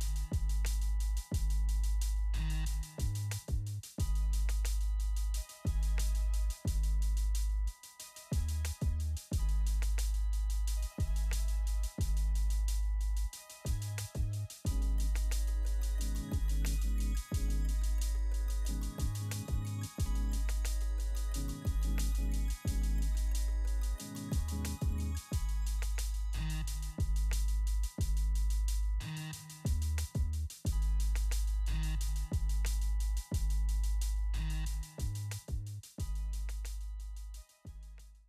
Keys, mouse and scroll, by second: 0.5 click, 1.1 ctrl+a, 1.4 ctrl+v, 2.7 click, 4.8 ctrl+a, 5.1 ctrl+v, 6.4 click, 7.0 ctrl+a, 7.3 ctrl+v, 7.7 click, 8.0 ctrl+a, 8.3 ctrl+v, 8.8 click, 9.1 ctrl+a, 9.4 ctrl+v, 10.2 click, 13.8 click, 16.7 click, 18.8 click, 20.7 click, 23.7-25.7 typing, 31.5 click.